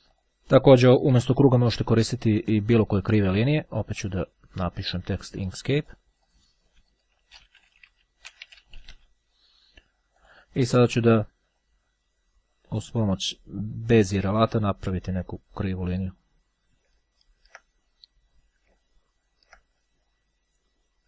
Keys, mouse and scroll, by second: 0.3 click, 0.8 Delete, 4.1 click, 5.9 click, 7.1-9.6 typing, 10.3 click, 12.9-14.7 drag, 15.4-21.0 drag.